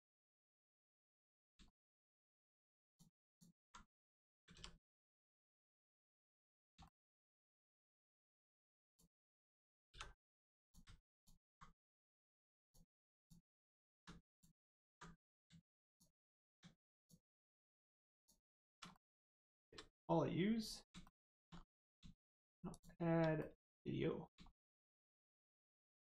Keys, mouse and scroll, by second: 1.2 click, 1.7 shift+middle click, 2.9 middle click, 3.3 alt+click, 4.5 ctrl+e, 5.2 click, 6.1-6.5 scroll down 1, 6.5 middle click, 6.8 shift+middle click, 8.4-8.9 scroll up 1, 8.9 click, 9.9 3, 10.6 click, 11.1 alt+click, 12.5 alt+shift+click, 14.3 shift+click, 15.9 alt+shift+click, 16.9 alt+shift+click, 18.1 alt+shift+click, 18.9 alt+middle click, 18.9 middle click, 19.4 shift+middle click, 21.5 scroll up 1, 22.7 shift+click, 23.3 middle click, 24.5 shift+middle click, 25.0 scroll down 1.